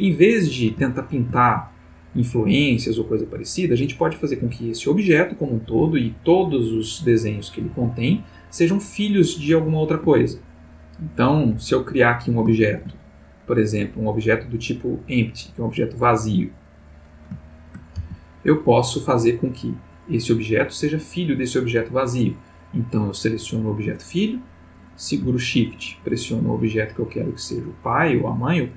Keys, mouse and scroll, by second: 0.9-1.4 ctrl+middle drag, 4.3 g, 5.7 Escape, 6.4-9.1 drag, 7.8 Escape, 10.2-11.5 ctrl+drag, 12.0 click, 12.6 shift+a, 14.8 click, 16.7 click, 17.4-18.0 ctrl+middle drag, 18.0 ctrl+g, 18.6 click, 19.9 click, 26.1 shift+click.